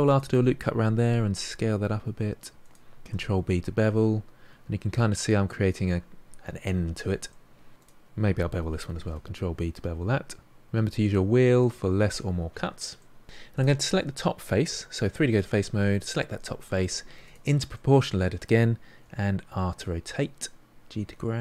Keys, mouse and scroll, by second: 0.9 s, 3.0 ctrl+b, 7.3 middle click, 7.8 alt+click, 8.9 ctrl+b, 13.0 middle click, 13.6 click, 14.6 3, 15.3 click, 17.2 click, 17.7-19.0 middle drag, 19.0 r.